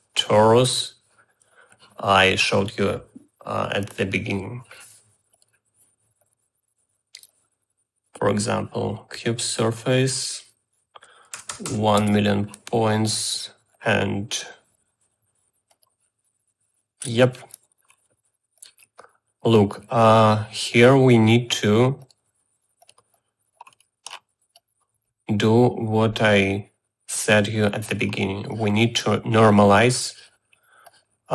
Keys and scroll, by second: 12.7 0, 12.9 Return.